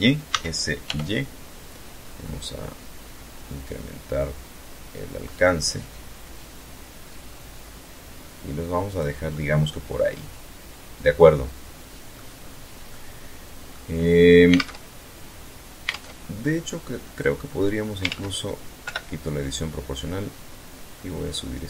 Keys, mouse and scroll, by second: 0.4 scroll down 1, 1.0 scroll down 1, 2.3 scroll down 2, 4.6-4.9 scroll down 2, 5.2 scroll down 2, 7.9 click, 8.4-11.4 middle drag, 11.4-11.7 scroll down 2, 11.7 scroll up 2, 11.9-12.9 middle drag, 13.6 alt+Tab, 14.9 alt+Tab, 16.2 click, 17.2 ctrl+z, 17.8 o, 18.6-21.0 drag, 21.0-21.6 middle drag.